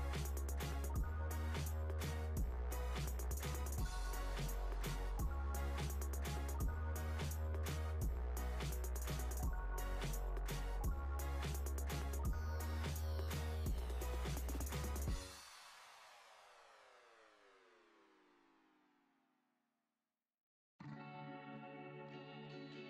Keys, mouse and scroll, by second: 0.2 click, 2.2 click, 3.1 click, 3.8 shift+click, 4.6 shift+click, 6.9 shift+click, 8.1 shift+click, 8.9 shift+click, 9.6-10.7 scroll up 3, 10.7 ctrl+b, 14.6 Tab, 16.0 click, 16.6 Tab, 17.7 alt+click, 18.9 ctrl+b, 20.8 Tab, 22.2 click.